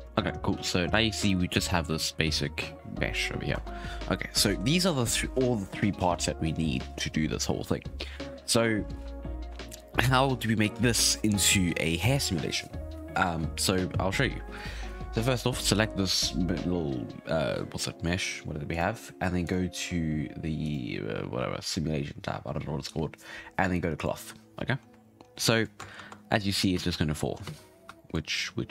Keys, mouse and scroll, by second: 0.1 shift+middle click, 0.5 a, 0.8-2.8 scroll up 1, 2.8-3.5 scroll up 2, 3.5 Tab, 18.7 click, 19.4 click, 20.6 click, 23.9 click, 24.8-25.2 scroll down 3, 25.2-25.9 scroll up 3, 25.9 shift+Left, 26.3 space, 26.7 space, 26.9-28.0 scroll down 14, 27.4 space, 28.0-28.7 shift+middle drag.